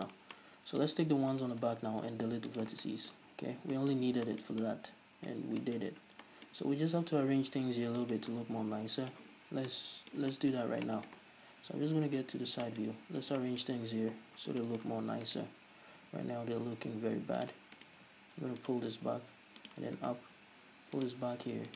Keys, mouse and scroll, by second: 0.1 click, 0.5-1.4 middle drag, 1.4-1.8 alt+right drag, 1.8 x, 3.0-15.4 middle drag, 3.4 z, 6.0-6.3 scroll up 2, 7.9 scroll down 2, 9.5-9.8 scroll down 2, 12.1 KP_3, 12.5-13.5 scroll up 3, 14.3 scroll up 1, 15.4 right click, 15.7 middle click, 15.7-16.0 scroll up 1, 16.0 g, 17.6 click, 17.9 right click, 18.0 g, 18.8 click, 18.9 g, 19.8 click, 20.1 right click, 20.4 g, 21.2 click, 21.5 g.